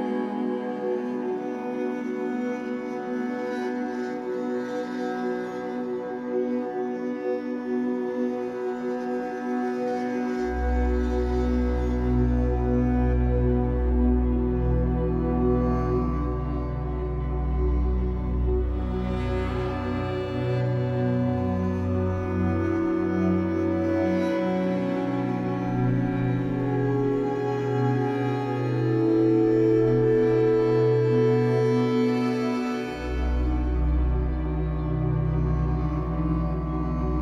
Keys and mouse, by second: 0.5 g, 1.7 click, 1.9-4.5 middle drag, 2.8 space, 4.5 typing, 5.9 typing, 7.2 click, 8.2 click, 8.5 typing, 11.7 space, 14.2-15.0 drag, 16.0 i, 16.2-16.9 drag, 16.9 ctrl+s, 19.0-21.7 drag, 22.6 g, 24.3 click, 26.6 7, 27.5 alt+shift+click, 27.9 alt+shift+click, 28.4 ctrl+alt+click, 29.6 g, 32.1 click, 33.2 0, 34.8 g, 36.1 click, 36.1 typing, 37.0-37.2 drag.